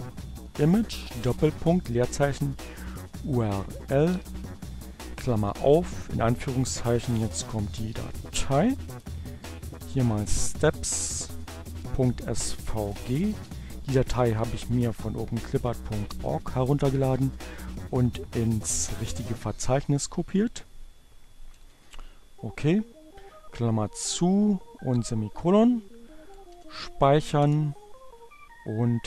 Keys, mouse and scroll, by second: 0.3 shift+space, 0.7 u, 1.9 r, 2.7 l, 3.1 shift+8, 5.4-9.0 typing, 10.5 BackSpace, 10.8 g, 12.7 shift+2, 20.9 shift+,, 25.9 ctrl+o, 26.3 Return, 28.3 alt+F2.